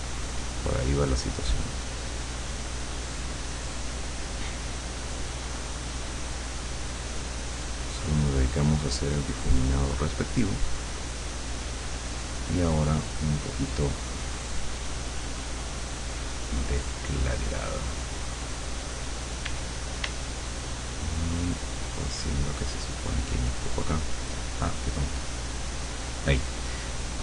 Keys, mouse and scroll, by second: 13.8 click, 16.0-17.4 drag, 19.5 d, 22.3 click, 25.1 click, 26.2 click, 27.0 click.